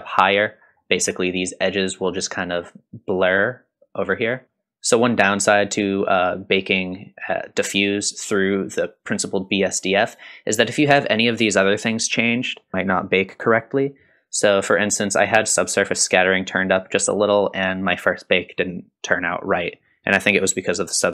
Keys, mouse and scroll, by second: 0.6-3.0 scroll up 3, 4.4 middle click, 4.4 scroll up 1, 15.4 click, 17.0-17.6 drag, 19.9-20.7 drag.